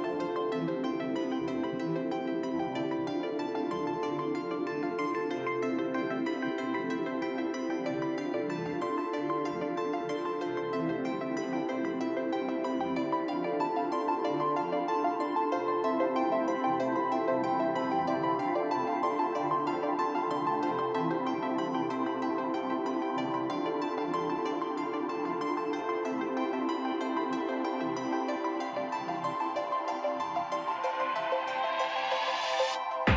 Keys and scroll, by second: 4.3 shift+s, 5.7 shift+s, 13.7 shift+s, 14.2 shift+s, 14.8 shift+s, 15.8 shift+s, 24.0-27.4 typing, 25.0 ctrl+z, 29.0 shift+s, 32.5 shift+s.